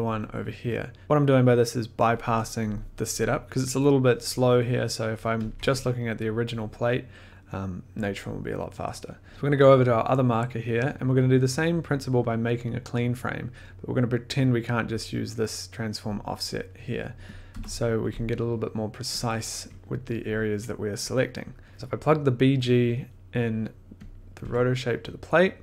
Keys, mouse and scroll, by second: 2.9 click, 3.4 scroll, 5.1 middle click, 5.4 click, 5.6 1, 7.4 middle click, 9.2 middle click, 9.3 scroll, 9.3 middle click, 10.5 middle click, 10.6 scroll, 11.0 click, 11.1 middle click, 11.5 scroll, 17.3 click, 17.5 p, 18.2 click, 18.3 middle click, 18.6 middle click, 19.2 click, 20.3 click, 20.3 scroll, 20.5 click, 21.1 click, 21.7 1, 23.2 scroll, 24.1 click, 24.4 1.